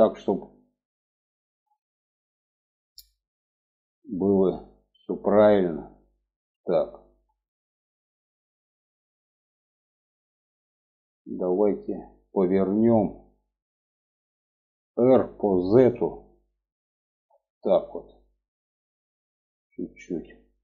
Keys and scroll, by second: 14.3 r.